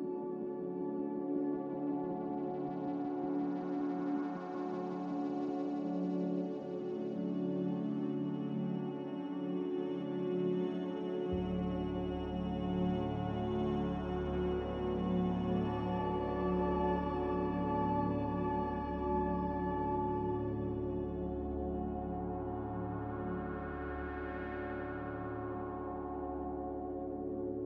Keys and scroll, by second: 2.3 z, 3.4-4.2 typing, 8.4 a, 25.9 a.